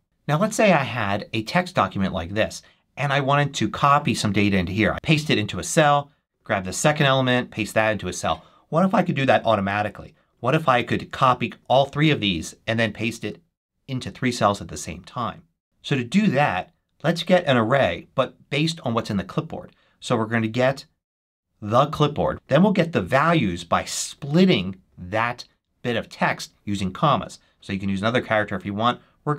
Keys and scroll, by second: 5.0 super+v, 6.6 super+c, 7.7 super+v, 8.8 super+v, 9.3 super+z, 18.0 super+v.